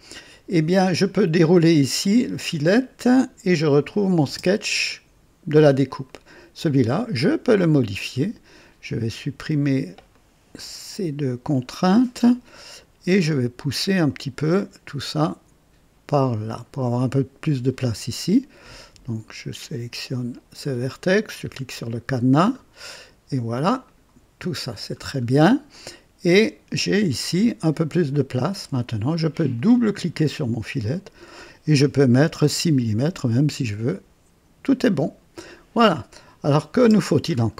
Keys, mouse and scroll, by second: 1.0 click, 2.0 click, 3.8 click, 4.4 space, 5.8 click, 7.1 scroll down 1, 7.5-8.2 right drag, 10.1 click, 10.6 Delete, 11.4 click, 11.8 Delete, 14.0-16.8 drag, 20.3 click, 21.8 click, 23.8 click, 24.8-25.4 scroll down 2, 25.7-27.4 drag, 27.4-28.1 right drag, 29.5 click, 30.9 click, 32.1-32.9 typing, 32.4 Return, 33.5-35.7 drag, 36.4 click, 36.7 space, 37.2 scroll up 1.